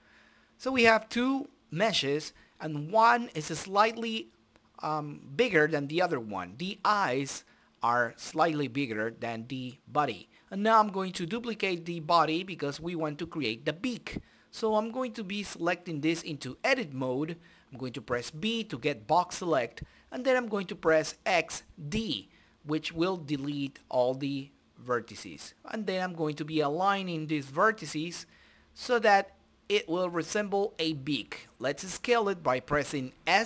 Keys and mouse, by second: 1.7-3.0 right drag, 3.3 shift+d, 4.7-6.0 right drag, 7.0 s, 8.6 right click, 9.5 g, 9.9 click, 10.0 right click, 10.9 Tab, 11.4 middle click, 11.7 right click, 11.7 a, 11.9 click, 11.9 1, 13.2 b, 13.7 Delete, 14.5 right click, 16.3 click, 17.0 o, 17.5 ctrl+space, 18.3 click, 19.0 middle click, 21.4 o, 21.6 click, 22.4 right click, 25.2 click, 25.9 right click, 26.2 middle click, 26.9 a, 27.1 middle click, 27.5 a, 28.0 middle click, 28.2 right click, 28.5 click, 29.2 Tab, 29.6 right click, 30.5 s, 31.1 right click, 31.3 z, 32.0 right click.